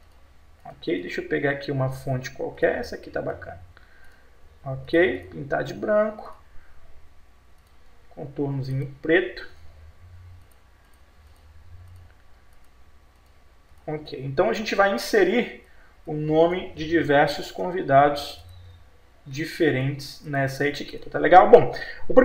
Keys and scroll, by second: 9.4 F12, 17.4 F12.